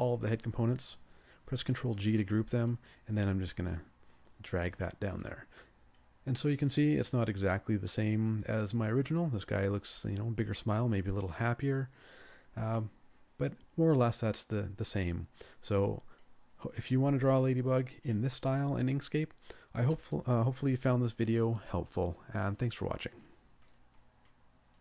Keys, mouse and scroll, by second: 1.8 ctrl+g.